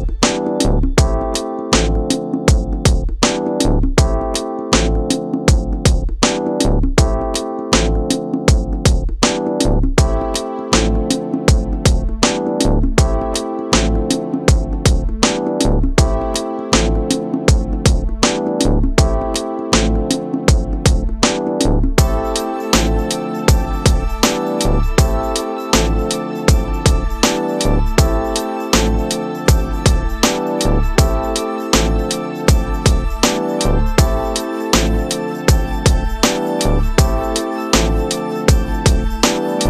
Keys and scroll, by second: 0.3 Return, 1.6 ctrl+d, 2.1 space, 2.7 ctrl+w, 3.0 Return, 5.6 alt+space, 6.5 c, 7.1 Return, 8.1 ctrl+KP_Add, 8.9 alt+i, 9.1 alt+a, 9.7 ctrl+space, 10.1 shift+F2, 10.6 space, 13.3 Return, 13.9 shift+F2, 14.6 ctrl+KP_Add, 15.3 space, 16.5 Return, 16.9 space, 17.8 ctrl+m, 18.7 Return, 19.3 ctrl+d, 20.1 ctrl+b, 22.5 Return, 22.9 space, 23.5 ctrl+g, 26.5 ctrl+space, 27.1 Return, 31.1 ctrl+space, 32.3 space, 33.5 space, 37.5 space.